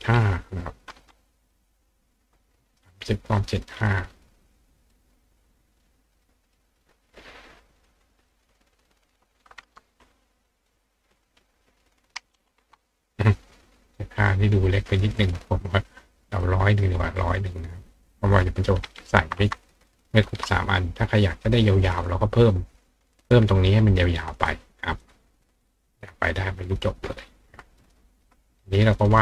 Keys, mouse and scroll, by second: 1.5 click, 2.9 click, 3.4 click, 4.9 click, 5.5 click, 6.1 click, 6.6 click, 7.9 click, 8.3 click, 10.7 click, 14.7 click, 16.4 click, 17.7 click, 25.0 click, 25.6 click, 27.6 click, 28.4 ctrl+click.